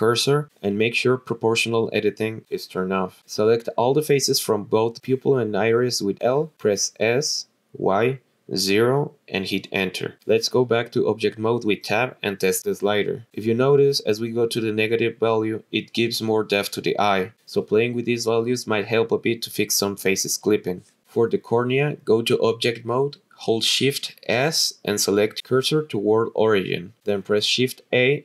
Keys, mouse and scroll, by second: 2.5 click, 2.9 click, 3.7 click, 4.5 middle click, 5.7 l, 6.3 l, 6.8 s, 7.3 y, 8.4 KP_0, 9.4 Return, 10.9 click, 15.4 click, 19.5 click, 21.2 click, 22.7 click, 24.5 shift+s, 27.9 shift+a.